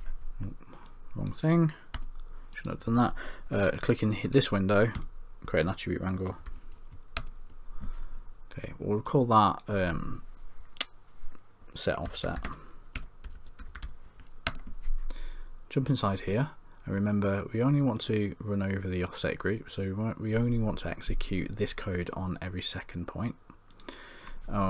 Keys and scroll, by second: 5.0 Tab, 6.4 typing.